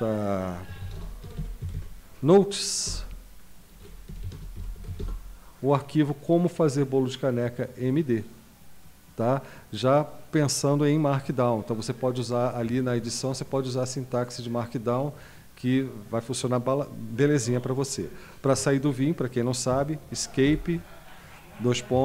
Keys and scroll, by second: 0.4-2.1 typing, 2.9 Return, 3.8-5.4 typing, 19.7 Escape, 20.4 typing, 21.9 typing.